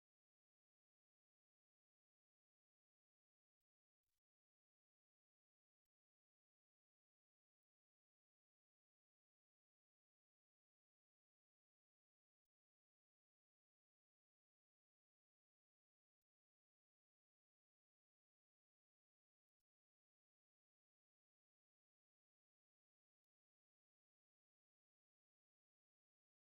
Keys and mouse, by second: 0.2 right click, 0.2 shift+middle click, 0.5 middle click, 1.3 shift+middle click, 2.3 right click, 4.7 ctrl+click, 5.4 ctrl+click, 7.7 ctrl+click, 8.7 ctrl+click, 10.3 ctrl+click, 10.8 ctrl+click, 11.4 ctrl+click, 11.7 shift+middle click, 12.7 ctrl+click, 13.4 ctrl+click, 14.6 ctrl+click, 15.1 shift+middle click, 16.1 right click, 16.4 shift+right click, 16.8 right click, 17.9 f, 18.5 right click, 19.0 shift+right click, 19.3-21.6 typing, 21.1 shift+middle click, 21.9 shift+right click, 23.0 f, 25.0 right click, 25.7 x.